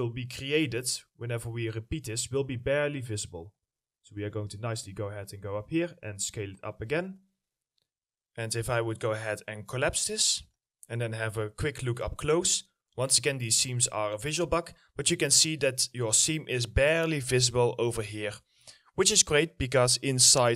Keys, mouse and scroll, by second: 0.0 ctrl+click, 1.3 middle click, 1.3 ctrl+click, 1.9-2.6 scroll up 1, 3.3 ctrl+click, 7.1-7.7 scroll up 1, 10.8 middle click, 11.2 scroll up 1, 11.9 alt+middle click, 13.1 ctrl+alt+middle click, 14.7 middle click.